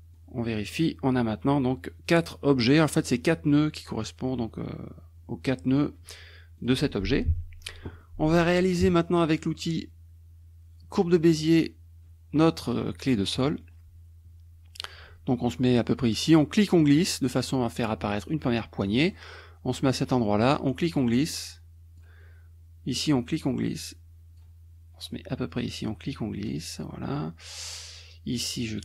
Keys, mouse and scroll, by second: 0.1 click, 6.6 click, 7.3 KP_Subtract, 8.0 click, 11.0 click, 13.2 click, 16.6-19.3 drag, 20.6-22.2 drag, 23.0-24.6 drag, 25.7-27.3 drag, 28.3-28.8 drag.